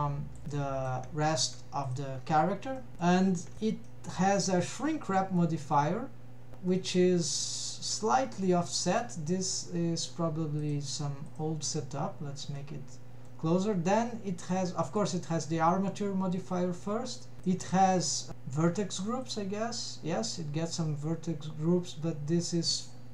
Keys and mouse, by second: 0.6 shift+middle click, 1.5 middle drag, 1.9 click, 2.8 middle click, 3.4 shift+middle click, 3.6 click, 3.9 middle drag, 6.8-8.1 middle drag, 8.5 middle click, 10.7 click, 11.4 click, 12.7-13.4 middle drag, 14.4 click, 15.1 click, 17.4 click, 17.9 middle click, 19.3 click.